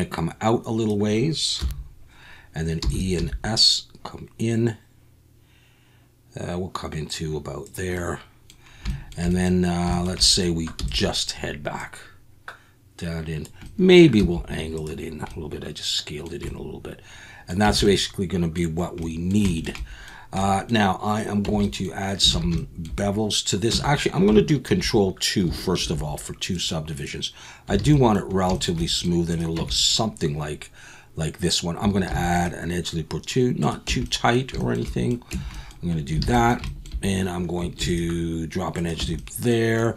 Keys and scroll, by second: 1.6 KP_1, 2.8 e, 3.2 s, 10.8 e, 14.2 s, 17.6 Tab, 21.4 Tab, 22.3 alt+a, 23.7 Tab, 25.8 ctrl+2, 27.8 alt+a, 29.6 Tab, 32.1 ctrl+r, 33.9 Tab, 35.3 Tab, 36.2 alt+a, 37.8 ctrl+r, 39.0 Tab.